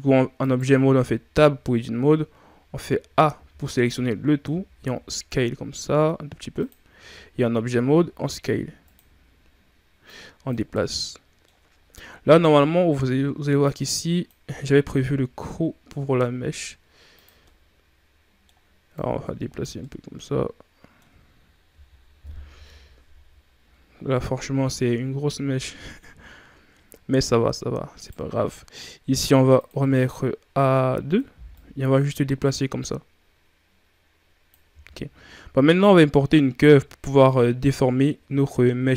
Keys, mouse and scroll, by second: 0.2 right click, 0.8 Tab, 2.5 a, 2.9 a, 3.2 a, 4.4 s, 6.8 Tab, 7.5 s, 9.9-10.6 drag, 10.6-11.5 middle drag, 11.5-11.9 scroll up 5, 12.2 shift+scroll down 3, 12.4-13.5 middle drag, 13.5-14.5 drag, 14.5 s, 17.3-18.8 middle drag, 18.8 click, 19.7-22.1 middle drag, 22.1 KP_1, 22.3 a, 23.0-23.7 scroll down 7, 26.9 scroll up 4, 27.8 right click, 29.4 click, 30.0 scroll down 1, 31.4-34.4 drag, 34.5 a, 34.7-35.3 scroll down 4.